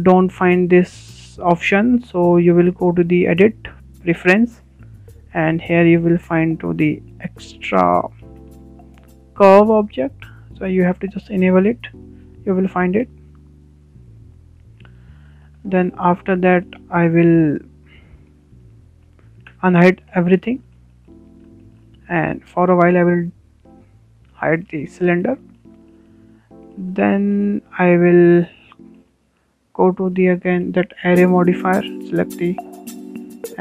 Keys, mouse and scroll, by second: 0.8 shift+a, 1.0 shift+a, 4.5-7.6 drag, 8.4-9.7 typing, 16.2-16.8 scroll up 4, 16.5 shift+middle click, 16.8-17.1 scroll down 4, 17.1-20.5 shift+middle drag, 20.7 alt+h, 21.6 scroll down 3, 21.8 shift+middle click, 22.4 scroll up 2, 22.6-23.4 shift+middle drag, 23.4 click, 25.3 h, 25.5 h, 26.0-26.3 scroll up 3, 26.3-28.1 shift+middle drag, 28.1 scroll up 1, 28.3-29.4 shift+middle drag, 29.4 click, 29.8-31.2 shift+middle drag, 31.2 click, 31.6-33.6 shift+middle drag.